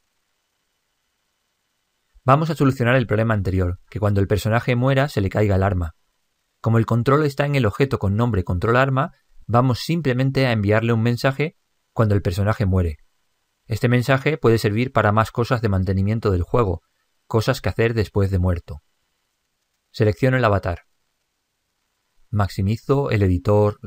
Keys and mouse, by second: 7.5 click, 20.7 click.